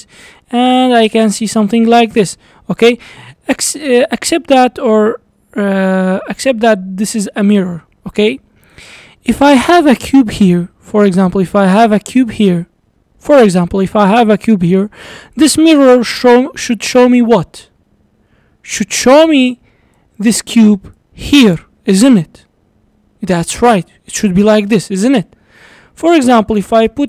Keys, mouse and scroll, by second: 2.3-3.4 scroll up 3, 2.5-7.5 middle drag, 3.4 s, 7.5 scroll down 2, 7.8-8.7 middle drag, 8.7 click, 9.5 shift+right click, 10.9 shift+a, 13.0 scroll down 3, 13.2-14.8 middle drag, 14.8-15.4 scroll up 2, 15.4 click, 19.0-19.8 d, 20.0-20.7 drag, 20.7 d, 21.0-22.1 drag, 22.1-23.6 d, 24.0 d, 24.2 right click, 25.2 d, 26.1 click.